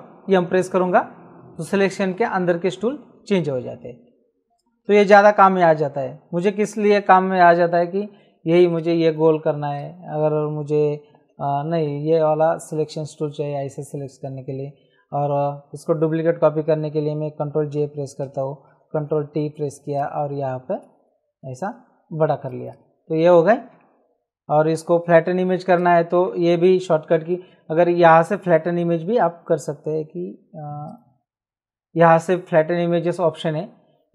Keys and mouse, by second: 0.2 shift+m, 1.6 shift+m, 8.7 click, 11.1 shift+m, 12.5 click, 17.5 ctrl+j, 18.7 ctrl+t, 19.9 shift+click, 22.4 click, 25.7 click, 26.7 ctrl+j, 30.9 click.